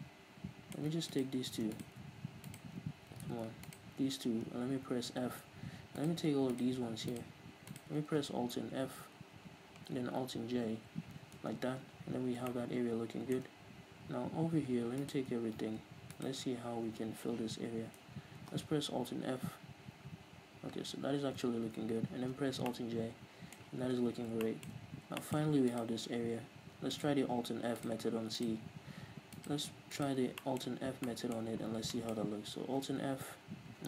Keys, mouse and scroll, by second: 1.1-3.3 right drag, 3.3 ctrl+z, 3.7 shift+right click, 4.6 f, 6.0-9.3 right drag, 9.3 alt+f, 10.6 alt+j, 11.4 Tab, 12.5-15.0 shift+middle drag, 15.0-17.2 alt+right drag, 17.2 z, 17.5 scroll down 2, 17.7 scroll up 2, 18.0 z, 19.6 alt+f, 21.3 alt+j, 22.3 Tab, 22.7-25.7 middle drag, 23.9 Tab, 25.7-30.4 alt+right drag, 30.4-33.8 shift+middle drag, 30.7-31.1 scroll up 2, 31.7 scroll down 2, 33.2 alt+f.